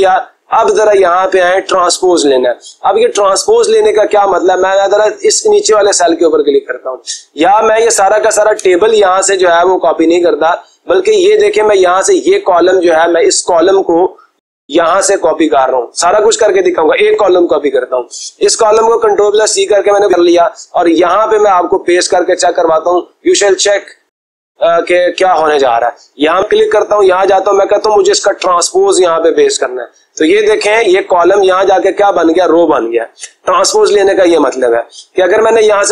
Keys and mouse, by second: 5.0 click, 5.9 click, 7.6 click, 8.8 Escape, 13.2 click, 19.1 ctrl+c, 22.8 click, 25.2 click, 27.1 click.